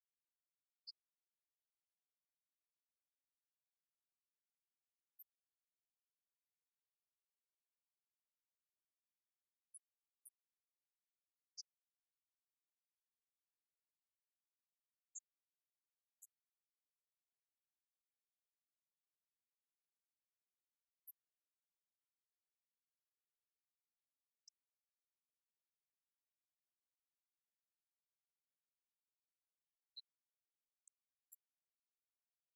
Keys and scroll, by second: 30.8 shift+p, 32.1 2.